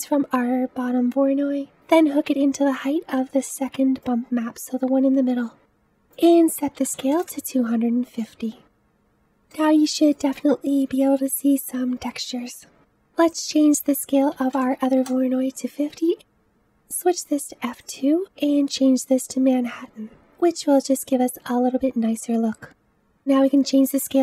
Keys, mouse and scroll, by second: 5.6-7.2 middle drag, 7.2-8.7 drag, 8.7-18.0 middle drag, 18.0 click, 20.1-22.7 scroll up 5, 22.7 scroll down 1, 22.7-24.2 drag.